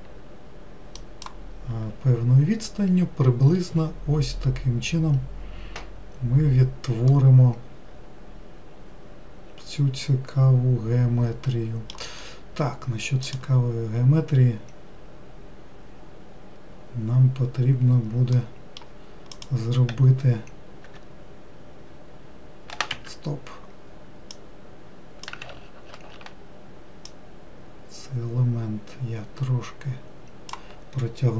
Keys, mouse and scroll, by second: 7.3-10.5 middle drag, 12.5-13.5 scroll up 1, 13.5 click, 18.6-19.6 middle drag, 19.6 click, 21.1 e, 24.6 click, 25.7 ctrl+z, 26.1 ctrl+z, 27.3 click.